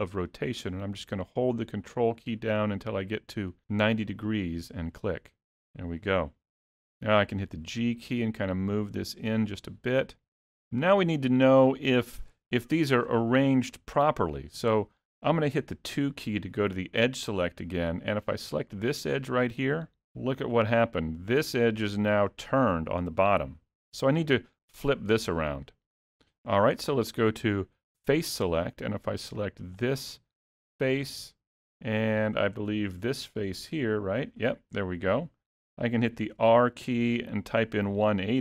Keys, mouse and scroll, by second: 5.7-6.4 scroll up 1, 6.9 g, 16.0 2, 17.2 middle click, 18.8 click, 28.2 click, 29.8 click, 31.9 middle click, 33.5 shift+click.